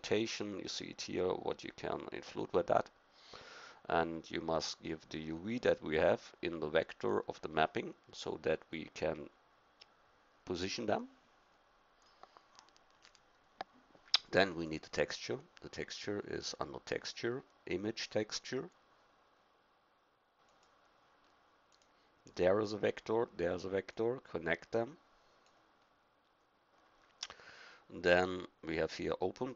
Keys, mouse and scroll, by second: 3.3-7.0 drag, 12.2-14.0 middle drag, 14.5-15.6 drag, 16.0-17.1 drag, 24.0 click.